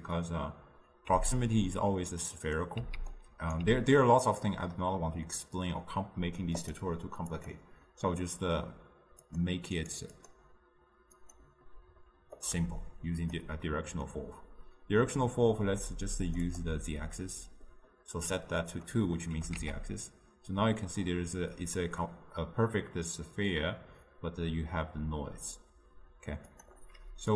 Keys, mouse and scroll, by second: 1.2 x, 2.0-3.2 drag, 3.2-4.7 right drag, 4.7-6.7 middle drag, 6.7-8.2 drag, 10.5 click, 13.7 click, 14.2-16.7 middle drag, 16.7-19.0 drag, 19.0 middle click, 19.7 g.